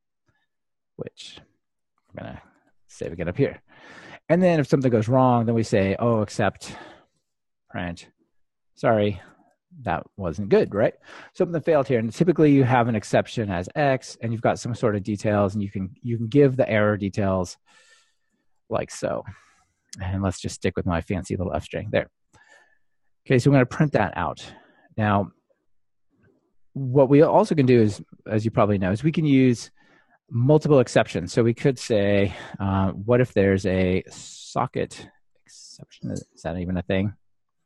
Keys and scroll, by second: 6.1 Return, 12.5 Return, 32.2 super+d, 36.7 alt+Return.